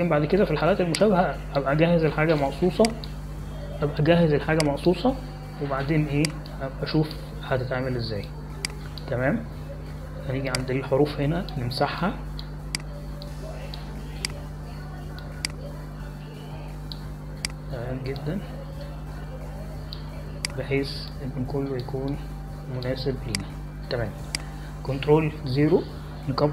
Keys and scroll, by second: 8.5 space, 22.9 space, 26.3 ctrl+0.